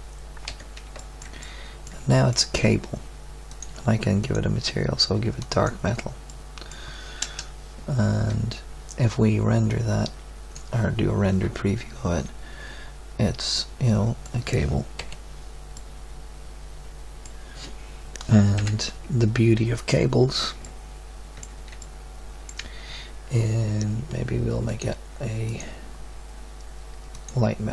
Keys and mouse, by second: 0.4 z, 7.2 KP_0, 15.0 KP_Decimal, 18.6 KP_1, 24.1-25.1 middle drag.